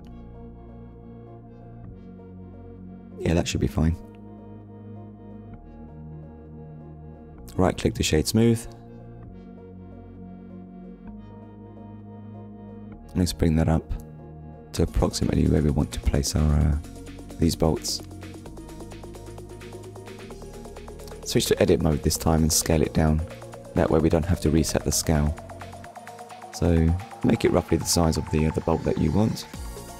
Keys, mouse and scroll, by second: 1.1 middle click, 3.1 click, 3.7 middle click, 6.3 right click, 7.0 click, 8.9 KP_1, 10.2 click, 12.0 click, 15.3 shift+middle click, 16.4 scroll up 1, 17.2 shift+middle click, 20.2 Tab, 29.1 click.